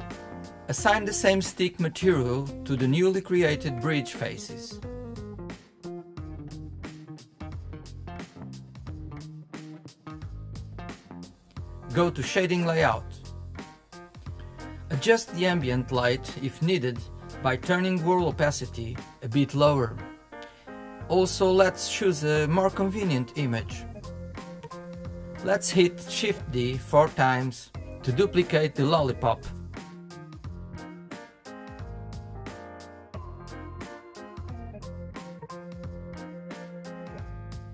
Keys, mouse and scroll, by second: 0.7 click, 1.4 scroll down 2, 1.7-4.9 middle drag, 4.9 click, 5.6-5.9 scroll down 1, 5.9-7.0 middle drag, 7.0 click, 7.3 click, 7.8-9.0 middle drag, 9.0-10.1 scroll down 10, 9.3 middle click, 10.1 shift+middle click, 10.7 Tab, 11.2 middle drag, 15.0-16.6 drag, 16.6-17.9 scroll down 1, 19.4-21.0 drag, 27.2-29.5 shift+middle drag, 30.4 middle click, 30.8 middle click, 31.3 middle click, 34.6-37.7 middle drag.